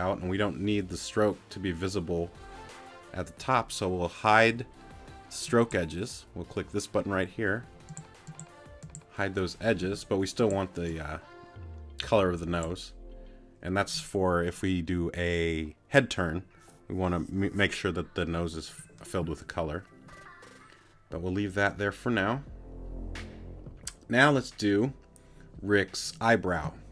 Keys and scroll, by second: 9.8 t.